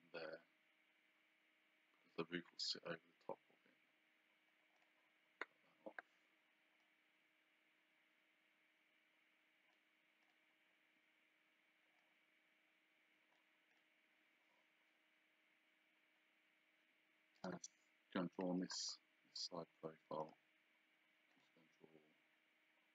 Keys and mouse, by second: 4.8 click, 6.8 click, 10.2 click, 12.0 click, 13.7 click, 17.4 click, 20.2 click, 21.3 click.